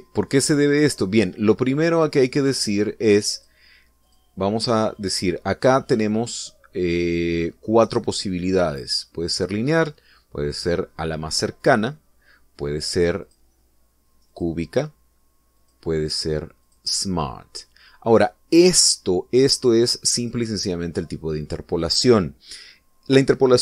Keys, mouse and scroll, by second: 4.4 click, 5.1 click, 6.0 click, 12.6 click, 14.3 click, 15.3 click, 16.6 click, 17.7 click, 20.4 click, 21.2 click.